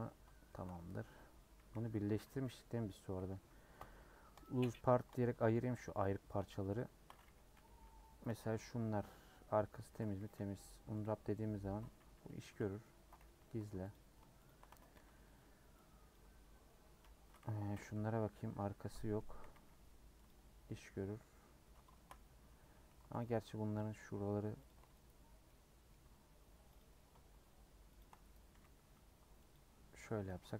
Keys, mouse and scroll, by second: 0.0 scroll up 1, 0.4 shift+middle click, 1.0 scroll up 1, 1.6 a, 2.3 3, 2.6 scroll down 3, 3.0-4.4 scroll up 1, 4.4 p, 4.8 Tab, 5.2 click, 5.6 click, 6.0 click, 6.7 shift+click, 7.5 /, 7.8 /, 8.3-9.7 middle drag, 9.7 Tab, 10.0 a, 11.0 u, 11.6 Tab, 12.1 /, 12.8 middle click, 13.2 h, 13.9 click, 14.7 Tab, 14.9 a, 17.7 /, 17.9-19.4 middle drag, 19.4 a, 20.3 u, 21.3-21.8 scroll up 2, 21.9 shift+middle click, 22.2-22.7 scroll up 1, 22.7 2, 23.2 alt+click, 23.5 scroll down 1, 23.7 middle click, 24.6 alt+shift+Left, 25.4-26.7 middle drag, 26.7 click, 28.5 a, 29.5 u, 30.2 Tab.